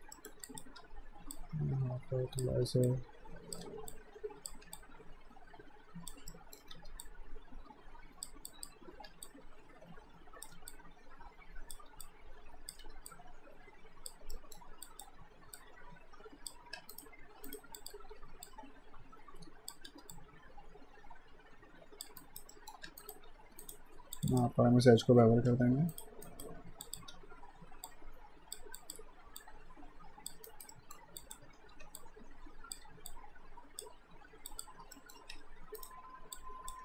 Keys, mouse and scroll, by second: 0.1 middle click, 0.5 click, 0.8 w, 1.3 click, 2.5 r, 2.9 click, 3.6 w, 3.9 click, 4.5 r, 4.7 click, 6.3 alt+middle click, 6.7 w, 7.0 click, 8.9 r, 9.3 click, 10.5 w, 10.7 click, 11.7 r, 12.0 click, 12.8 w, 13.1 click, 14.4 middle click, 14.9 click, 16.7 q, 16.9 right click, 17.8 click, 18.1 r, 18.5 click, 19.9 w, 20.1 click, 22.2 alt+right click, 22.5 alt+middle click, 22.9 q, 23.0 right click, 24.2 click, 25.1 ctrl+b, 25.9 right click, 26.3 alt+right click, 26.8 click, 27.1 w, 27.9 click, 30.5 alt+right click, 30.7 alt+middle click, 31.2 click, 31.7 r, 32.0 click, 32.9 w, 33.1 click, 34.5 click, 35.0 alt+middle click, 35.3 q, 35.8 right click, 36.4 click.